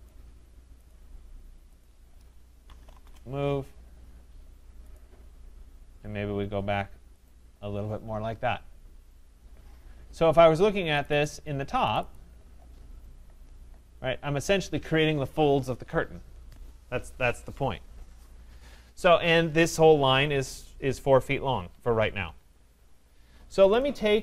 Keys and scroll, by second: 3.0 Return, 21.6 Escape.